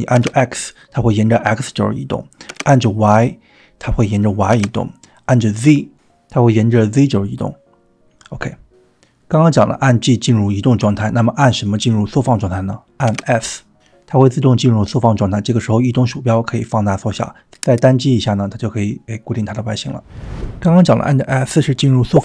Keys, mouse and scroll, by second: 13.2 s, 17.3 z, 17.3 s, 18.0 drag, 18.1-18.7 middle drag, 18.9 scroll down 2, 19.7 s, 20.4 g.